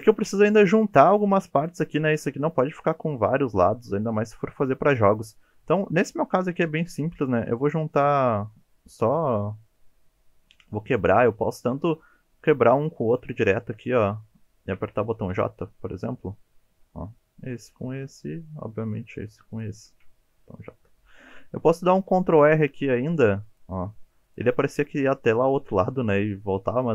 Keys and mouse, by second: 0.4 shift+middle drag, 1.6 click, 13.2 shift+click, 15.3 j, 17.6 click, 18.0 shift+middle click, 19.5 shift+click, 20.4 j, 22.0 ctrl+r, 24.3 click.